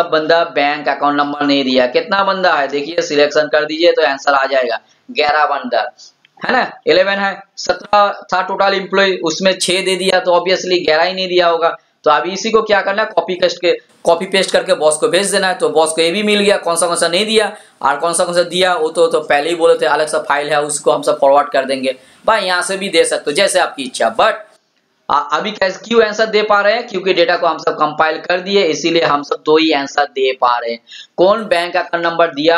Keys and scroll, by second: 27.1 ctrl+shift+l.